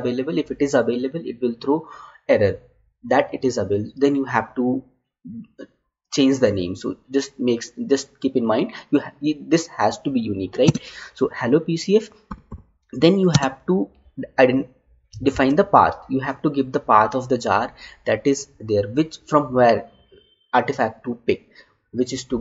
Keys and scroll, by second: 10.6 space, 13.3 space, 15.3 Tab.